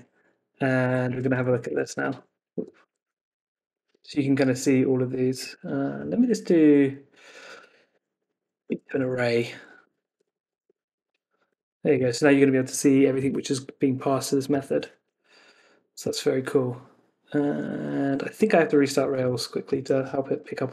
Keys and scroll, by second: 2.5 Escape, 3.8 Escape, 4.4 Left, 11.1 Right, 12.1 super+s, 15.0 super+r, 18.3 super+Tab, 19.8 ctrl+c, 20.3 Up, 20.6 Return.